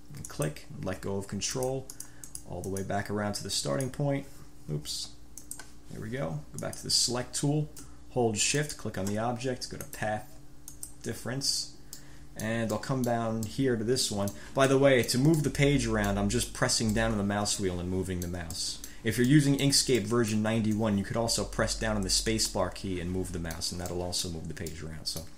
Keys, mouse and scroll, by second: 0.4 ctrl+click, 1.7-3.2 drag, 3.8 click, 4.9 Delete, 5.6 click, 6.8 click, 8.7 shift+click, 10.0 click, 10.8 click, 12.1 click, 12.9-13.4 drag, 13.6-14.0 drag, 14.0 middle drag, 14.2 click, 14.3 middle click, 14.4 click, 14.8 click, 15.3 middle click, 15.6 middle click, 16.1 middle click, 16.3 drag, 17.2-18.7 middle drag, 18.8 click, 18.9 middle click, 19.5 middle click, 19.6 click, 19.7 middle click, 19.8 drag, 20.2 click, 22.7-24.0 drag, 24.1 click, 24.5 middle drag, 24.9 middle drag, 25.1-25.3 drag.